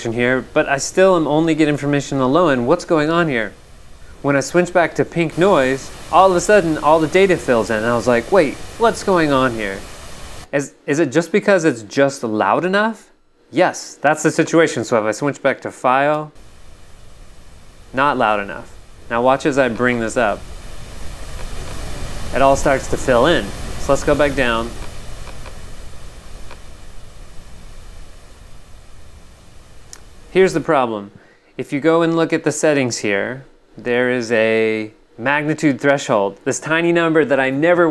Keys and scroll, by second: 10.3 g, 16.1 g, 17.5 v, 24.9 v, 28.5 v, 30.5 g.